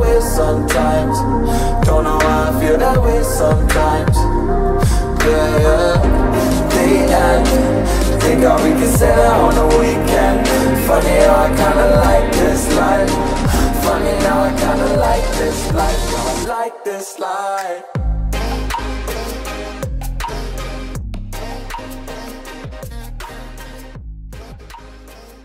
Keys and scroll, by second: 16.4 space.